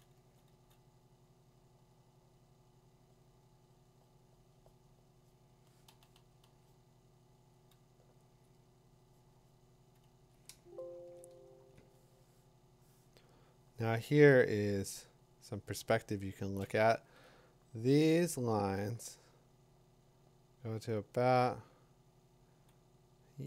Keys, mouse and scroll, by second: 0.2 2, 0.5 3, 3.5 [, 5.9 ], 6.1 ], 6.5 ], 8.4 click, 8.4 3, 11.1 click, 15.2-18.3 drag, 17.4-18.2 [.